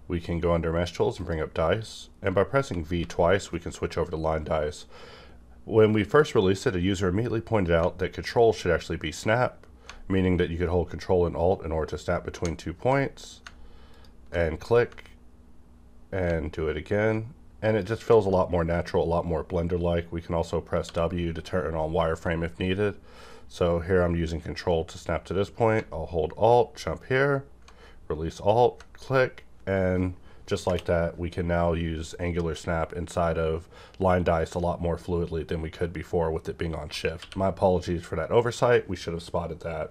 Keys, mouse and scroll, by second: 1.1 click, 2.6 v, 3.0 v, 13.9 ctrl+click, 17.6 ctrl+click, 20.8 ctrl+w, 28.3 ctrl+click, 30.6 ctrl+space, 37.2 ctrl+q.